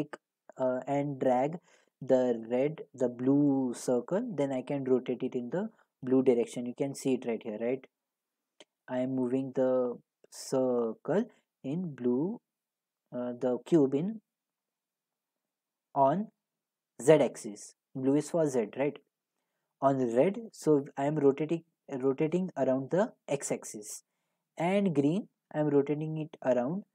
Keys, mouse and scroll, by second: 0.6 click, 14.7-19.8 drag, 24.3-26.9 drag.